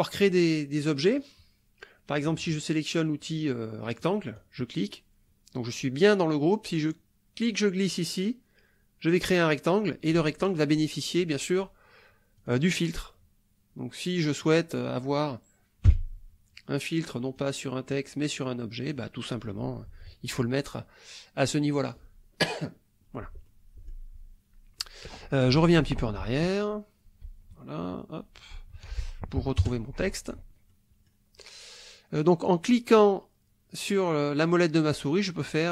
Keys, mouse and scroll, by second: 1.1 click, 4.0 click, 7.5-9.3 drag, 12.4 click, 14.5 click, 15.9 Delete, 17.4 click, 17.9-19.1 drag, 23.5 click, 26.0 ctrl+z, 27.2 ctrl+z, 28.5 ctrl+z, 29.4 ctrl+KP_Subtract, 29.6 KP_Add, 30.7-31.3 scroll up 2, 32.7 click, 33.5-33.9 scroll up 2, 33.9 middle click, 34.5 middle click, 35.3 middle click.